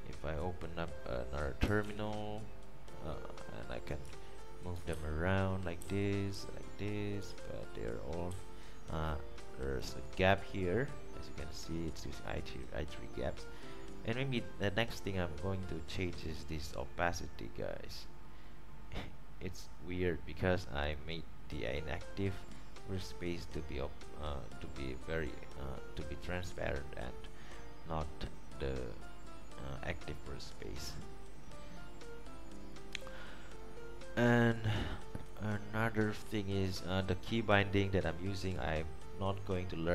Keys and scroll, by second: 2.0 super+t, 5.1 alt+shift+Down, 6.6 alt+shift+Left, 8.5 alt+shift+Left.